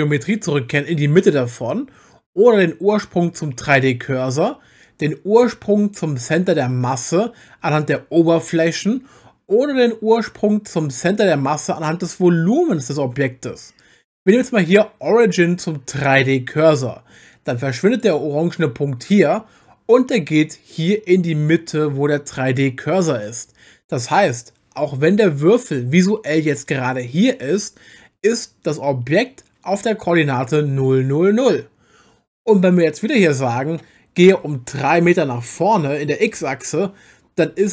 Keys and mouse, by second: 33.2-36.4 drag.